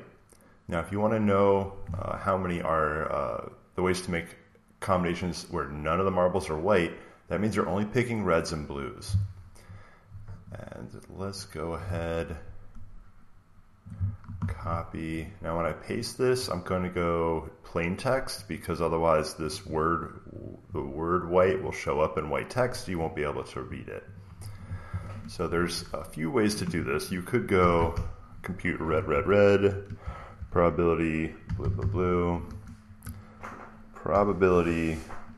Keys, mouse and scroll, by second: 0.5 click, 10.4 click, 13.7 click, 14.3 ctrl+c, 15.2 click, 15.6 click, 15.9 right click, 18.5 click, 19.4 click, 19.5 click, 20.4 click, 21.4 click, 21.5 click, 23.0 click, 24.0 click, 25.6-32.5 typing, 25.7-27.5 drag, 29.0 Return, 32.4 Return, 33.7-35.3 typing.